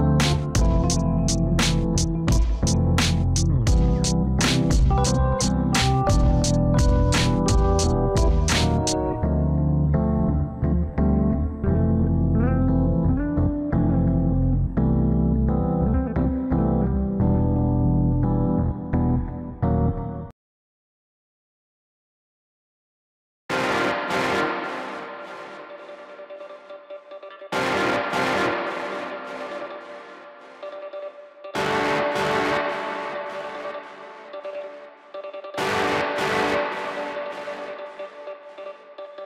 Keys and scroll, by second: 7.9 alt+w, 23.3 ctrl+z, 29.6 alt+x, 37.9 ctrl+x.